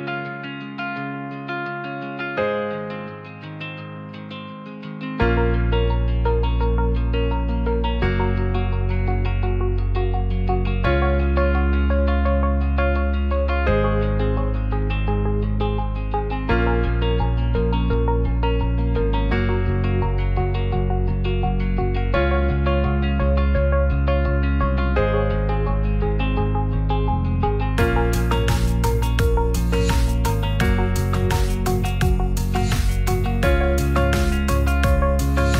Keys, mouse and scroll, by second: 0.0 click, 0.3 middle click, 1.7-2.7 middle drag, 3.1 ctrl+r, 5.0 s, 7.8 click, 8.7 ctrl+b, 13.0 Tab, 13.8 Tab, 14.2 alt+z, 15.6 c, 16.0 s, 16.1 z, 18.1 g, 18.2 z, 20.1 click, 20.4 Tab, 20.8 alt+z, 21.0 middle drag, 21.9-22.4 middle drag, 23.1 middle click, 24.1 q, 27.2 click, 29.7 middle click, 30.1 click, 30.3 middle drag, 31.0 shift+middle drag, 31.4-31.8 middle drag, 32.1 shift+middle drag, 34.0 shift+middle drag, 34.8 shift+d.